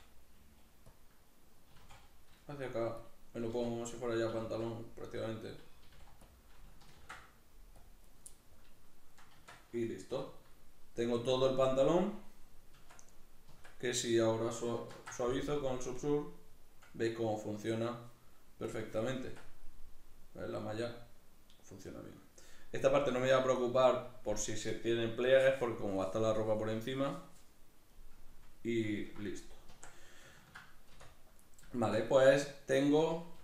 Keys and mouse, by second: 0.8 click, 1.5 s, 2.8 click, 3.2 g, 3.8 click, 4.1 s, 5.1 click, 5.6 g, 6.1 click, 6.8 ctrl+r, 7.9 right click, 8.1-18.4 middle drag, 9.2 Tab, 9.9 \, 12.5 Tab, 14.7 ctrl+2, 18.4 click, 18.9 Tab, 19.4-33.4 middle drag, 29.5 Tab, 30.7 \, 33.2 g.